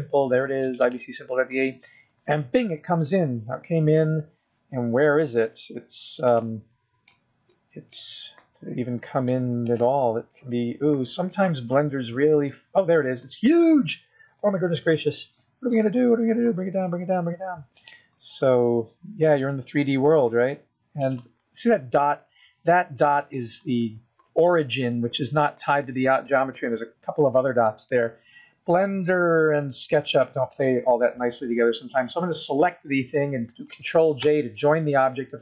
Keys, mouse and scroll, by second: 2.9-3.5 scroll down 2, 4.2 s, 6.9-7.3 scroll down 4, 7.3 middle click, 8.4 scroll up 1, 8.4 scroll down 1, 9.2 s, 10.3-10.8 scroll up 10, 11.4-13.1 scroll down 30, 13.1 scroll up 3, 14.6 middle click, 15.3 s, 18.3-19.3 scroll up 13, 20.2 s, 22.0 scroll up 3, 23.4 scroll down 1, 23.6 middle click, 27.9 middle click, 29.0 b, 32.2-32.9 scroll up 2, 32.9 scroll down 1, 34.5 ctrl+j.